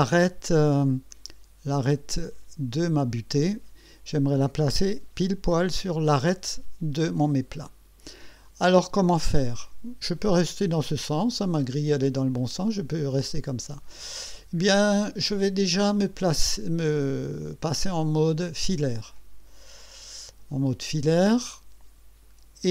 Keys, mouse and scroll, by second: 0.6 right click, 10.1-11.1 right drag, 12.3-13.7 drag, 17.7 click, 19.1 click, 21.1 click, 21.4 click.